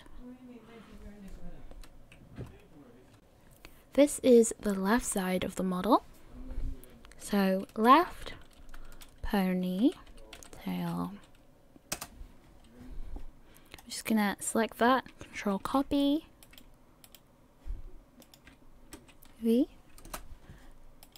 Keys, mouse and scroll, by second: 13.8 click, 15.6 ctrl+c, 17.3 right click, 18.2 click.